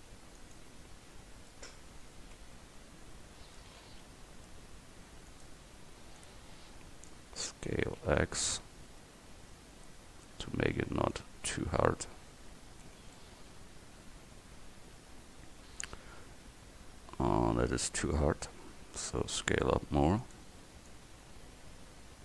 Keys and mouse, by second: 2.7 KP_1, 4.1 s, 6.3-10.3 drag, 7.7 s, 11.2-12.9 drag, 12.9 Tab, 18.0 Tab, 18.9 s, 20.9-22.1 drag.